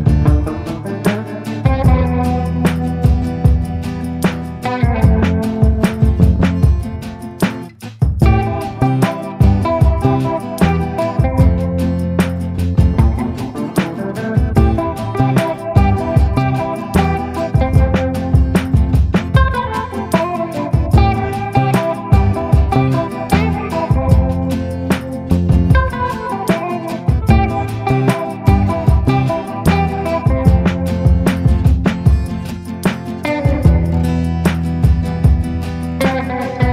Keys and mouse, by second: 0.0-0.1 typing, 2.0 middle click, 2.6 shift+middle click, 3.1 b, 4.6 b, 6.1 b, 7.2 b, 7.7 b, 9.0 b, 9.9 middle click, 10.4 b, 12.3 b, 13.5 b, 14.5 middle click, 15.3 shift+click, 18.0 shift+click, 23.4 click, 24.3 shift+middle click, 24.6 middle click, 25.9 a, 26.3 middle click, 27.0 middle click, 27.9 click, 28.9 ctrl+z, 29.2 middle click, 29.5 middle click, 29.9 middle click, 30.2 middle click, 31.2 ctrl+i, 32.0 b, 33.0 b, 34.4 b, 35.2 b, 35.8 b.